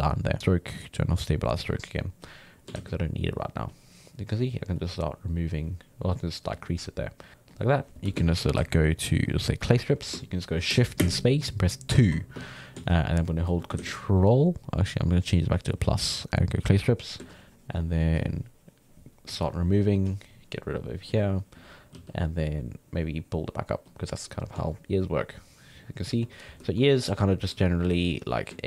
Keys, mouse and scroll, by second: 0.3-2.7 drag, 2.7 ctrl+z, 3.0-8.2 drag, 8.2 shift+space, 11.0 shift+space, 12.0 2, 12.9 ctrl+click, 13.8 ctrl+z, 14.9 click, 16.5-21.9 drag, 21.9 f, 22.6-26.7 drag, 26.7 shift+middle click, 27.2 d, 28.1 click.